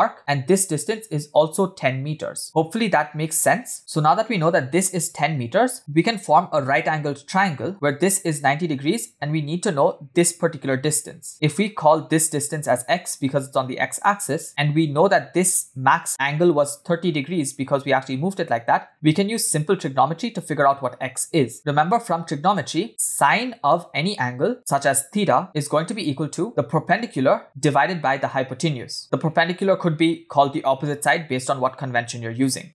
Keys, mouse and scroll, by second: 0.2 click, 1.1-2.4 drag, 3.8 ctrl+click, 8.3 click, 11.3 click, 12.5 click, 15.1-16.1 drag, 16.7 click, 17.5 click, 18.5 click, 23.3 click, 24.2 click, 25.4 click, 26.5 ctrl+z, 27.4 click, 28.9 click.